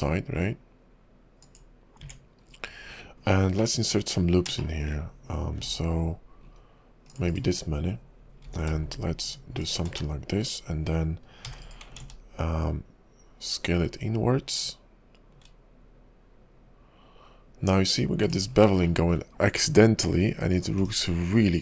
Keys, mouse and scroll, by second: 2.0 Tab, 2.6-3.4 scroll up 3, 3.4-3.7 scroll down 2, 3.7 middle click, 4.3 scroll down 2, 4.7 shift+middle click, 5.6 ctrl+r, 8.4 ctrl+b, 10.1 middle click, 11.6 e, 12.0 alt+s, 18.6-19.0 scroll up 3, 19.0 shift+middle click, 19.4-19.8 scroll up 2, 19.8 middle click, 20.8 /.